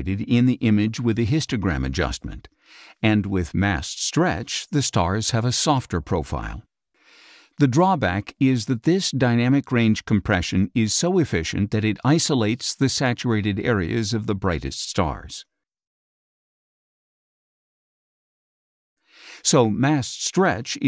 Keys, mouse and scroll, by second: 0.2 ctrl+shift+z, 2.0-3.1 ctrl+shift+drag, 2.0 space, 3.5 z, 8.1 z, 8.7 space, 8.9-10.2 drag, 12.2 ctrl+shift+z, 16.4 space, 16.8 click, 17.9 click, 19.0 click, 19.9-20.8 drag.